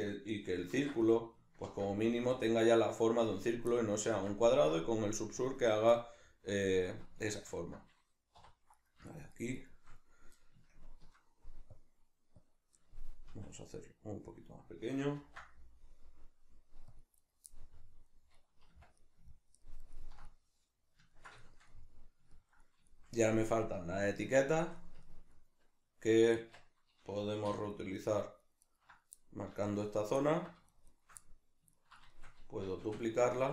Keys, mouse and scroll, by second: 0.7 ctrl+z, 1.0-3.3 middle drag, 1.6 ctrl+r, 3.3 click, 3.7-5.7 middle drag, 4.1 ctrl+r, 5.7 right click, 5.9-8.7 middle drag, 7.3 ctrl+z, 8.7 right click, 9.1 shift+right click, 9.3 shift+right click, 9.5 shift+right click, 10.7 ctrl+KP_Add, 11.7 click, 13.3 s, 14.3 click, 15.1 ctrl+r, 17.3 right click, 17.5-27.7 middle drag, 18.7 Tab, 26.4 Tab, 27.7 right click, 28.1 ctrl+right click, 28.7 ctrl+right click, 29.2-30.7 middle drag, 30.7 shift+right click, 30.9 shift+right click, 31.2-33.2 middle drag, 32.9 shift+d, 33.2 right click.